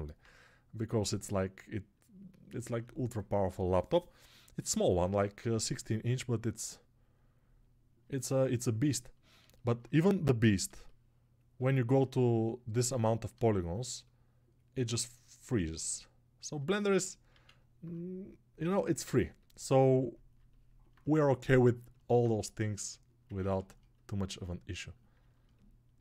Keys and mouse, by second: 5.3-7.9 right drag, 7.9 alt+click, 8.1 right click, 8.2-25.1 alt+drag, 25.1 alt+shift+right click, 25.7 alt+click.